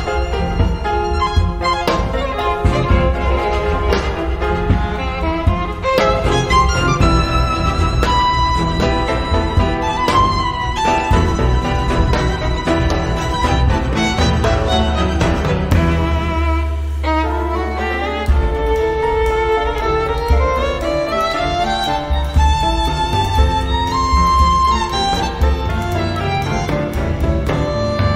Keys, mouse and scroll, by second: 2.4-2.7 scroll down 2, 2.8-4.3 drag, 4.6-5.0 scroll up 1, 5.2-5.6 scroll down 1, 6.0 scroll up 1, 7.2-15.4 drag, 24.2 click, 25.4 click.